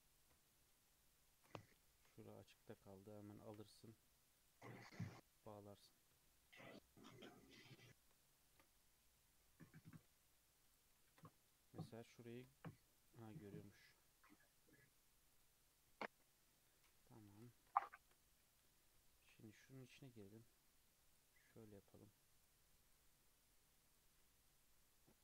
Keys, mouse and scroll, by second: 0.5 shift+middle click, 1.5 scroll up 3, 1.8 shift+middle click, 2.2 scroll up 2, 3.0 click, 3.4 1, 3.6 click, 4.4 shift+click, 5.4 j, 6.2-8.5 shift+middle drag, 8.5 ctrl+r, 11.1 ctrl+z, 11.3 scroll down 2, 11.4 scroll up 1, 11.5 middle click, 12.0 scroll down 1, 12.3 ctrl+r, 16.0-16.4 scroll down 2, 17.1 KP_3, 17.8-18.3 shift+middle drag, 18.3 alt+z, 18.7 scroll up 2, 19.0-19.6 shift+middle drag, 19.6 3, 20.4 click, 21.6 shift+middle click, 22.4 shift+click, 23.5 shift+drag, 23.9 shift+click, 24.2-25.2 shift+middle drag.